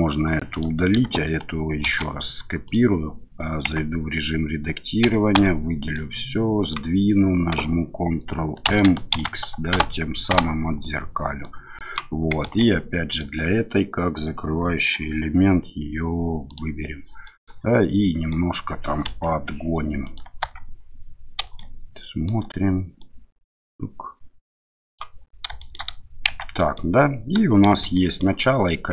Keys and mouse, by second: 0.5 click, 1.8 shift+d, 2.6 click, 3.6 Tab, 5.0 a, 5.3 a, 5.9 click, 8.6 ctrl+m, 9.1 x, 10.3 Return, 11.5 click, 12.4 Tab, 13.1 click, 17.2 middle click, 18.0 middle drag, 19.1 KP_1, 20.0 click, 20.4 Tab, 21.6 shift+middle click, 23.0-25.0 drag, 25.6 shift+middle click, 26.3 Tab, 26.6 middle click, 27.7 shift+z, 27.9 middle drag.